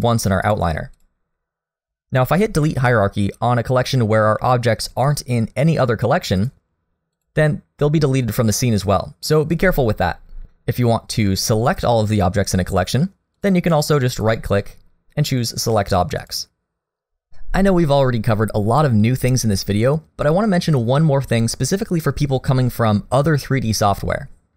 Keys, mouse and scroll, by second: 0.4 click, 1.0 click, 6.4 right click, 10.4 ctrl+z, 13.4 click, 14.1 right click.